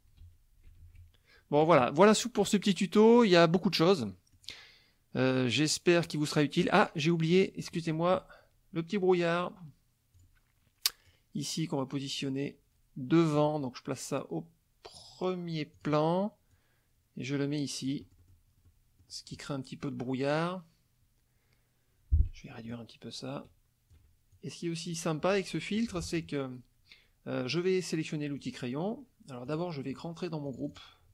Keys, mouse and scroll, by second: 0.2 ctrl+z, 0.7 ctrl+shift+z, 1.6 click, 1.8 middle click, 3.2 click, 4.1 middle click, 6.0 middle click, 7.3 click, 9.4 click, 10.2 click, 11.1-13.6 drag, 15.8 click, 16.5-18.5 drag, 18.0 right click, 18.7 middle click, 22.7-24.1 ctrl+drag, 24.3-25.5 ctrl+drag, 28.4 click, 29.5 click, 29.9 click, 30.5 click.